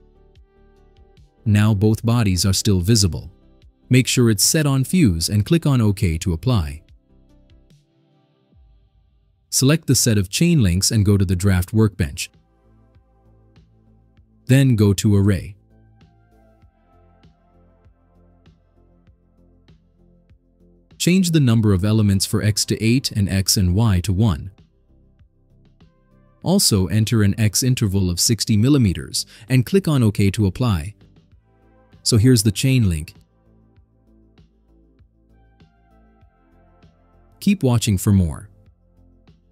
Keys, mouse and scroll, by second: 0.5 click, 7.1 click, 8.3 click, 9.8 click, 13.8 click, 16.0 click, 17.5 click, 18.5-18.9 scroll down 4, 19.4 scroll down 2, 19.8 right click, 22.3 click, 23.2 8, 23.8 click, 24.2 1, 24.7 click, 26.0 click, 28.3 6, 28.6 0, 28.9 click, 30.7 click, 31.2 click, 31.7-32.5 scroll down 6, 32.9-33.5 right drag, 33.7 middle click, 33.7-34.3 scroll down 4, 34.2 middle click, 34.7-36.3 right drag.